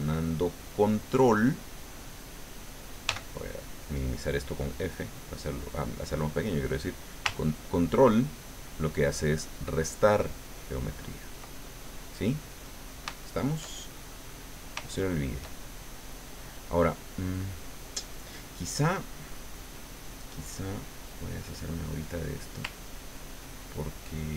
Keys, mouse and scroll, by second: 3.1 f, 5.3 click, 8.0-11.4 ctrl+drag, 11.6 ctrl+middle click, 12.4-13.6 middle drag, 13.7 shift+middle click, 14.9 shift+middle click, 15.9 shift+middle click, 19.6-20.8 drag, 21.3 click, 22.8-24.3 ctrl+drag.